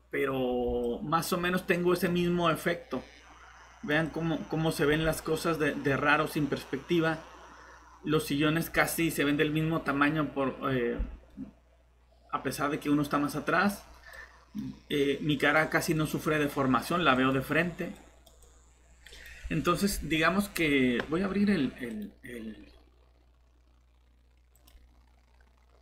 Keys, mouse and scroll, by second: 20.2 scroll up 1, 21.9 click.